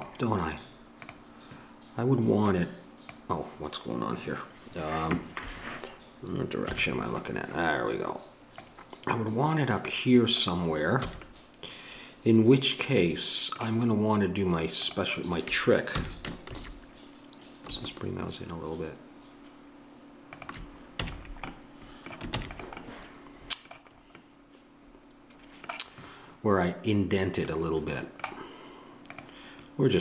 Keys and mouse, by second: 1.0-6.7 drag, 6.7 KP_3, 8.6-10.3 drag, 11.1 a, 14.8-20.3 drag, 16.0 s, 21.0 a, 22.3 ctrl+s.